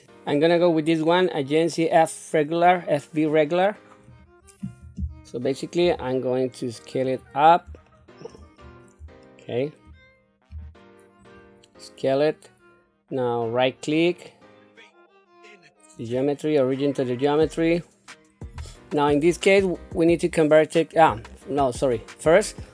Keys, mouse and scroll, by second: 5.7 s, 7.7 shift+middle click, 8.4 scroll down 2, 9.0 shift+middle click, 10.3 s, 16.0 right click, 21.2-22.4 middle drag.